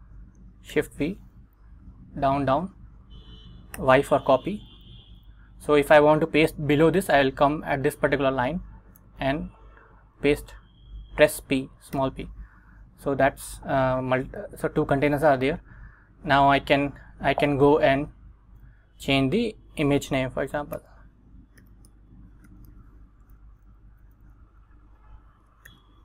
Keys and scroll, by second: 0.8 shift+v, 1.8 Down, 3.9 y, 5.0 Down, 8.6 Right, 9.1 Left, 12.1 p, 17.1 Escape, 17.4 Right, 18.2 Right, 19.0 Right, 20.9-23.3 typing, 23.6 Escape, 24.0 Down, 24.3 Left, 25.8-26.0 typing.